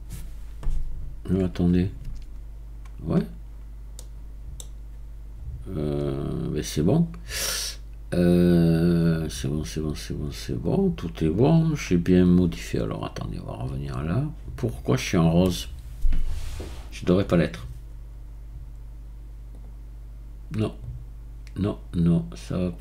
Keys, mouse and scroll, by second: 2.0 Tab, 6.0-6.4 scroll down 2, 7.6-8.2 scroll up 5, 13.4-13.8 scroll down 10, 13.8 click, 19.6 click, 20.7 click.